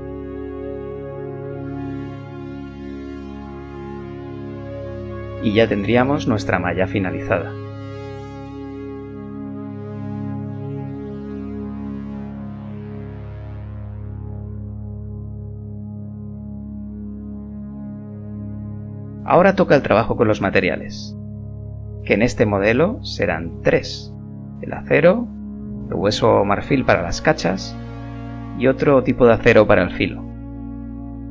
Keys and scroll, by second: 0.4 g, 0.8 g, 3.9 g, 6.5 z, 9.4 KP_1, 15.6 Tab, 19.7 Tab, 21.9-22.5 typing, 25.8 shift+c, 26.0 a, 26.2 a, 26.2 h, 29.1 shift+f.